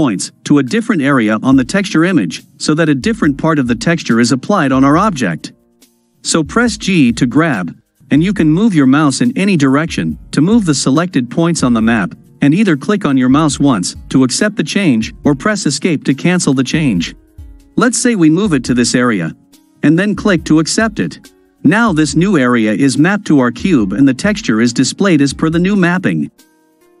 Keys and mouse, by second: 6.8 g.